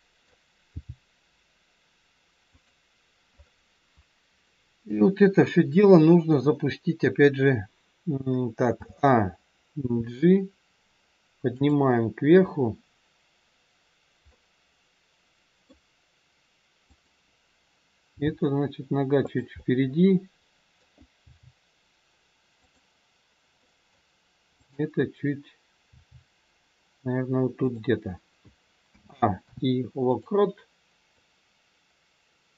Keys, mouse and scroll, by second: 0.7 g, 4.5 middle click, 5.1-6.1 scroll down 1, 6.1 KP_1, 6.8-7.5 scroll down 1, 8.6 a, 9.7 g, 14.4 middle click, 16.9 click, 18.1 g, 19.5 middle click, 21.2 g, 23.6 middle click, 24.5 click, 25.8 g, 28.8 a, 29.3 i, 31.2 click.